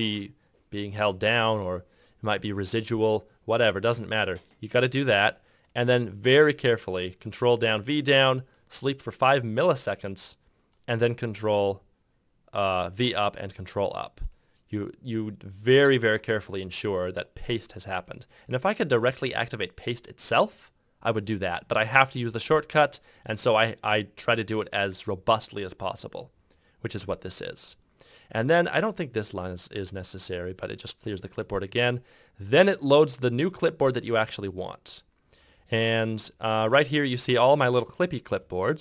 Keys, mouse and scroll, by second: 35.6 ctrl+F2.